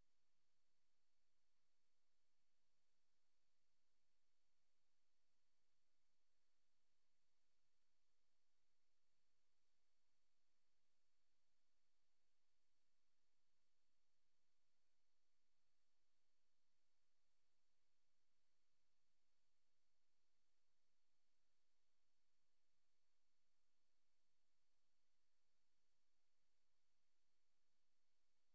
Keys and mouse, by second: 1.6 click, 2.6 click, 4.0 click, 4.5 typing, 6.2 click, 8.0 ctrl+z, 9.5 click, 10.2 click, 13.3 Return, 14.3 click, 15.5 click, 16.6 click, 19.2 click, 20.1 click, 21.0 click, 23.3 click, 25.6 click.